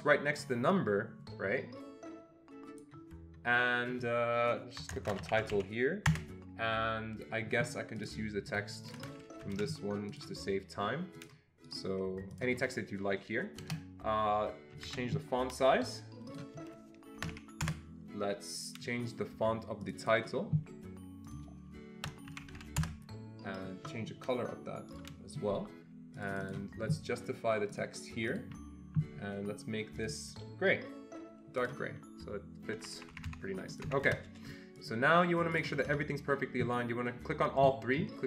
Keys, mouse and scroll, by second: 0.8-6.1 drag, 4.8-6.0 typing, 6.1 Return, 8.0 click, 8.7 click, 8.9 double click, 9.0 click, 9.6 ctrl+c, 10.1 click, 11.2 click, 11.7 right click, 12.3 click, 13.6 BackSpace, 14.8 ctrl+a, 16.3 click, 17.0-17.8 typing, 19.8 click, 20.0 double click, 21.3 click, 22.0-23.2 typing, 24.9 click, 26.1 click, 26.3 double click, 26.4 click, 27.7 click, 28.3 click, 30.0 click, 31.5 click, 32.8 Escape, 33.0 Escape, 33.1 Escape, 33.3 Escape, 33.7 click, 33.9 Escape, 35.6 ctrl+double click.